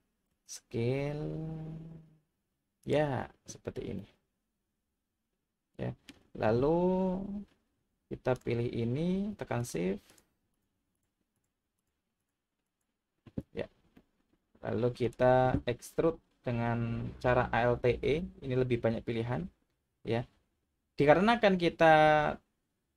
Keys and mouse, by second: 0.3 s, 2.8 click, 4.0-6.1 middle drag, 9.6 shift+click, 11.0 shift+drag, 11.3 shift+click, 11.8 shift+click, 12.2 shift+click, 12.7 shift+click, 14.0-15.0 middle drag, 18.0 alt+e.